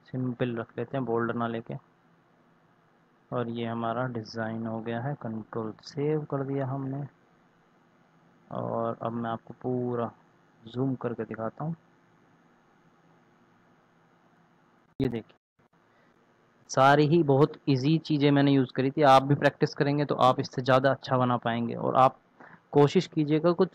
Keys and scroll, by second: 5.3 ctrl+s.